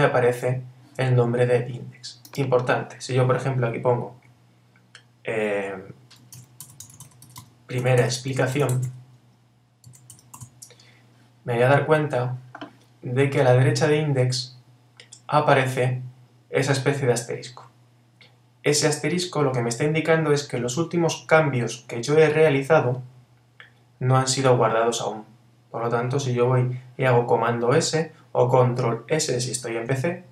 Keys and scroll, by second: 6.3 shift+p.